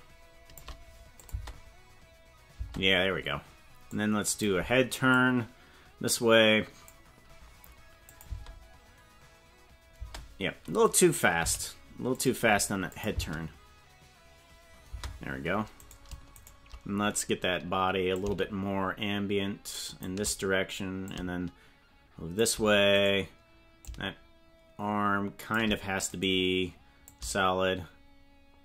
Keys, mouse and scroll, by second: 1.2 click, 1.3 space, 2.5 space, 3.9 click, 5.2-7.0 drag, 8.2 click, 8.2 space, 10.0 space, 10.8 right click, 11.4 g, 12.9 click, 13.2 space, 14.9 space, 15.9 right click, 16.4 shift+right click, 18.1-20.0 shift+drag, 21.0-22.4 shift+drag, 23.0 right click, 23.8-25.6 shift+drag, 26.2 right click, 27.0-28.6 shift+drag.